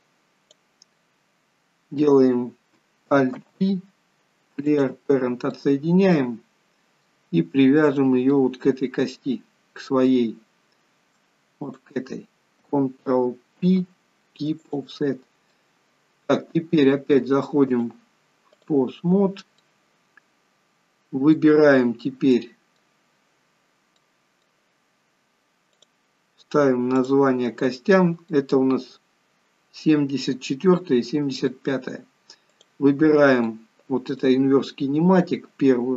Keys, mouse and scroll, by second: 5.7 alt+p, 5.7 middle click, 7.5-7.9 scroll up 3, 7.9-8.3 scroll down 2, 8.4 middle click, 11.7 shift+click, 13.7 ctrl+p, 15.1 scroll down 3, 15.7 middle click, 17.8 click, 19.4 scroll up 2, 19.7 middle click, 21.9 scroll up 1, 22.5 middle click, 23.1 scroll down 2, 24.1 middle click, 25.9 click, 27.2 click, 27.8 middle click, 29.0-29.5 scroll up 1, 29.9 scroll down 1, 30.9 middle click, 32.6 click, 33.6 middle click.